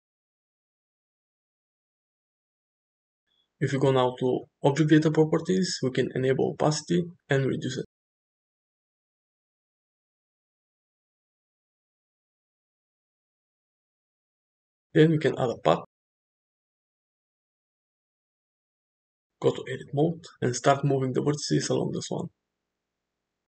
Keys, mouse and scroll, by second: 1.1 shift+middle click, 3.5 click, 5.0 click, 5.7-8.8 drag, 9.4 shift+middle click, 10.4 shift+a, 11.3-11.7 middle drag, 12.4 middle click, 12.7 shift+a, 17.4-17.8 middle drag, 19.8 Tab, 20.4 drag, 20.8 g, 22.3 click, 22.8 g.